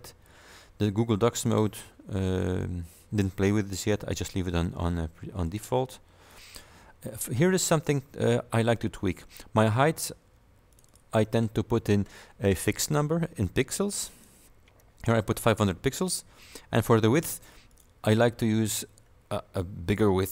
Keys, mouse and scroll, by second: 0.1-0.4 scroll down 2, 3.8 click, 5.5 click, 8.4-8.7 scroll down 1, 10.8 click, 14.2 click, 17.8 click.